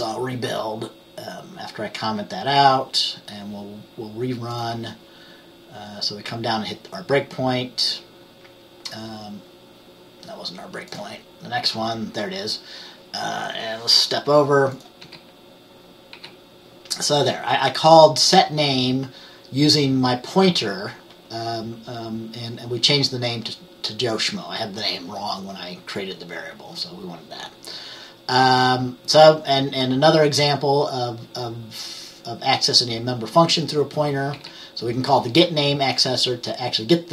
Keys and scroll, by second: 15.1 F10, 16.2 F10, 34.4 F10.